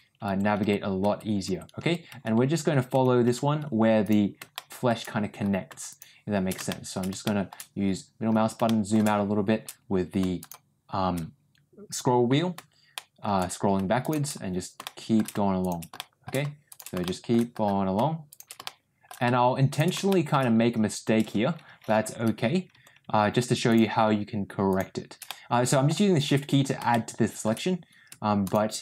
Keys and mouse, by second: 4.4 shift+middle click, 5.8 shift+click, 6.6 shift+middle click, 7.1 shift+middle click, 8.5 shift+middle click, 10.3 shift+click, 12.8 shift+middle click, 14.7 shift+middle click, 15.9 shift+middle click, 16.9 shift+middle click, 18.2 shift+click, 18.5 shift+middle click, 19.6 shift+click, 20.0 shift+middle click, 24.6 shift+click, 25.2 middle click, 26.8 shift+middle click.